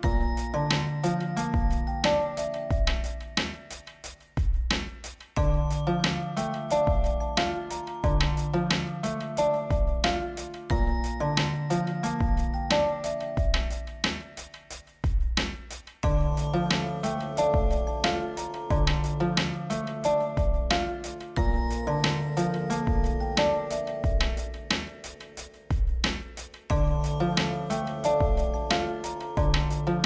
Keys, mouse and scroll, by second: 0.6-3.3 drag, 3.6 -, 4.0 Return, 4.4-7.7 drag, 8.4 alt+scroll up 1, 9.0 scroll down 1, 9.7 Right, 10.3 Left, 10.6 Down, 11.0 Right, 11.2 Down, 11.8 Right, 12.3 Down, 12.5 Right, 13.5 click, 14.3-14.6 alt+scroll down 1, 15.6 scroll up 1, 16.3 click, 16.6 a, 17.4 click, 18.0 a, 19.3-22.5 shift+drag, 22.9 v, 23.7 click, 24.6 shift+m, 25.0 click, 26.1 v, 26.6 click, 26.8-27.2 scroll down 2, 27.5 ctrl+0, 28.6-29.8 drag.